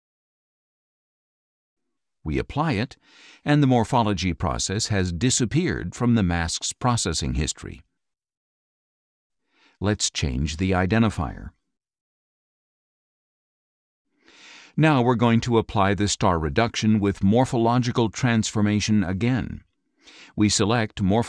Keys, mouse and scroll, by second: 0.9-2.4 drag, 5.0 click, 9.0 click, 11.0 click, 11.5-13.1 typing, 13.5 Return, 16.0 click, 17.1 click, 19.8-21.2 drag.